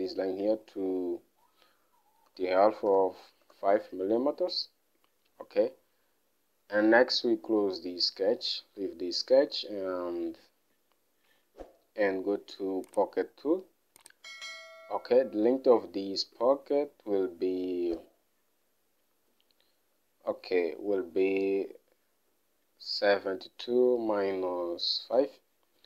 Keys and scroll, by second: 2.7-5.3 typing, 8.6-9.4 typing, 16.7 alt+Tab, 17.0 alt+Tab, 25.7 alt+Tab.